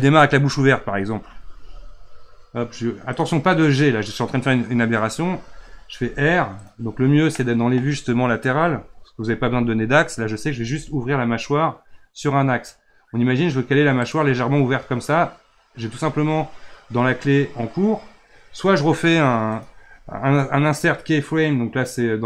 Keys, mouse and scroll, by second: 1.4 g, 5.9 r, 7.3-7.8 middle drag, 7.8-8.5 scroll up 1, 8.5 KP_3, 10.5 r, 19.5-22.2 right drag.